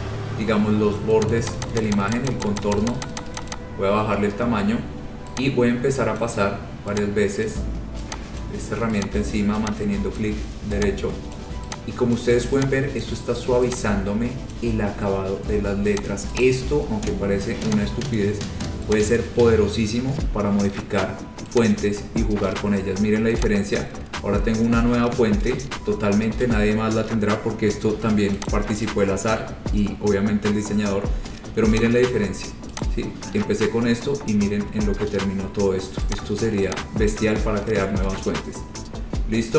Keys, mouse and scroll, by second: 1.4 click, 1.7 click, 1.8 click, 1.9 click, 2.1 click, 2.3 click, 2.4 click, 2.5 click, 2.7 click, 2.9 click, 3.1 click, 3.2 click, 3.3 click, 3.5 click, 3.6 click, 6.3 click, 7.6 click, 8.6 click, 9.5 click, 10.3 click, 11.5 click, 12.3 click, 13.2 click, 14.7 click, 16.2 click, 16.6 click, 16.8-17.4 scroll, 18.3 click, 19.3 click, 20.2-21.1 scroll, 21.9 click, 23.6 click, 28.7 click, 29.2-29.8 scroll, 30.3-31.5 scroll, 32.2 click, 33.0 click, 34.4 scroll, 35.5 scroll, 36.3 click, 37.3 click, 37.6-39.5 scroll.